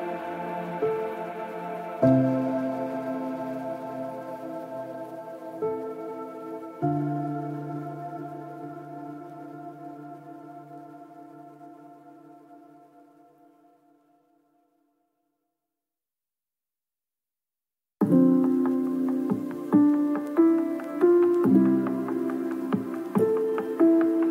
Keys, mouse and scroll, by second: 0.0 click, 4.3 click, 5.2 click, 5.3 KP_0, 5.4 KP_0, 5.8 middle click, 6.1 click, 7.5 click, 9.2 click, 9.3 KP_0, 9.6 right click, 12.1 middle click, 12.2 click, 13.5 middle click, 13.6 KP_0, 13.7 middle click, 13.8 KP_0, 14.0 ], 14.4 click, 14.9 click, 16.9 middle click, 17.5 click, 22.1 alt+shift+middle click, 22.7 click, 24.1 click.